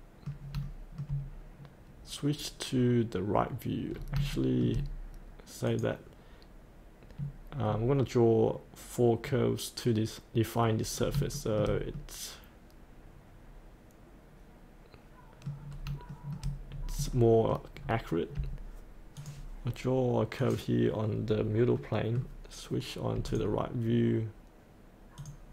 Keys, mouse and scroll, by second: 0.6 shift+middle click, 1.2-3.9 scroll down 1, 3.9-4.2 scroll up 1, 4.3 shift+middle click, 5.6 click, 7.7-11.0 scroll down 1, 11.0 scroll up 1, 11.3 shift+middle click, 12.0-15.5 middle drag, 15.6 scroll up 1, 16.1 shift+middle click, 16.6-17.1 scroll down 1, 17.1 middle click, 17.8-19.2 scroll up 1, 19.2 click, 21.7 middle click, 23.2 click.